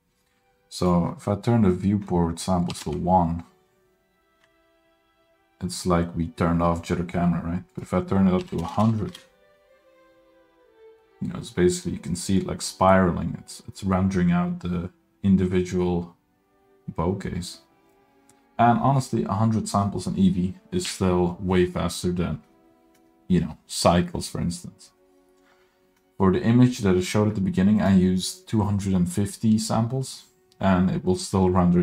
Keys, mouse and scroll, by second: 0.8-3.0 drag, 7.7-9.3 drag, 8.7 KP_0, 27.8-31.8 drag.